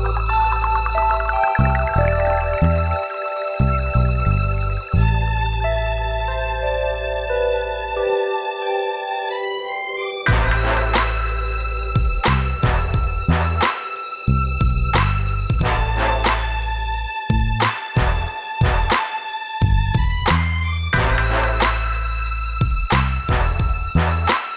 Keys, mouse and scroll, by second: 2.2 click, 4.2 click, 4.6 click, 6.0 click, 8.0 p, 8.9 scroll down 2, 10.1 scroll down 2, 12.6 middle click, 14.5 click, 15.3 click, 16.2 click, 18.3 click, 18.4 click, 20.3 scroll up 2, 21.6 click, 21.7 click, 22.8 click, 24.5 click.